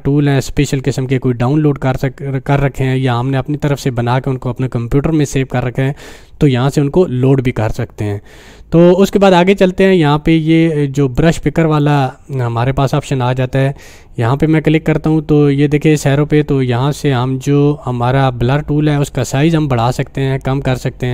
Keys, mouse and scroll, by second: 11.2 click, 19.2-21.0 drag.